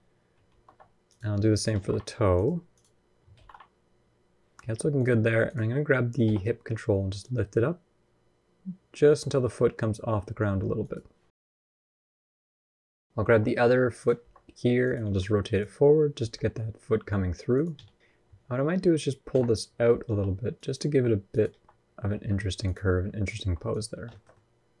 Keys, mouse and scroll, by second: 0.3 alt+r, 0.8 click, 1.5 alt+r, 1.6 alt+g, 2.1 click, 3.0 click, 3.1 alt+r, 3.2 alt+g, 4.7 click, 6.0 g, 11.9 click, 13.0 g, 14.0 r, 14.8 g, 15.9 g, 18.0 KP_3, 19.1 KP_1, 19.8 g, 20.6 r, 21.3 g, 22.7-23.2 scroll down 2, 23.2 r, 23.7 scroll down 3, 23.9 shift+middle click, 24.1 middle click, 24.6-24.8 scroll up 2.